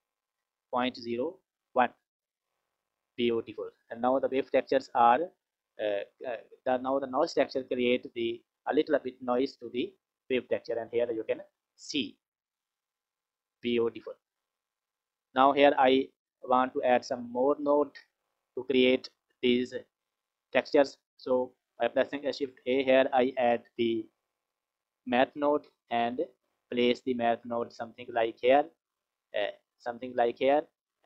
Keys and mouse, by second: 7.2 click, 11.8 click, 12.6 click, 13.1 click, 14.4 click, 15.0 click, 17.5 click, 19.1 click, 20.0 click, 21.9 shift+a, 28.3 click, 29.1 click, 30.4 click.